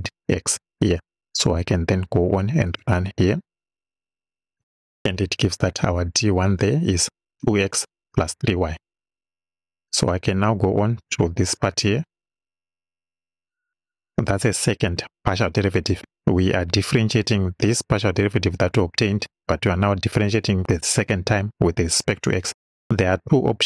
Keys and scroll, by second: 14.3 Return.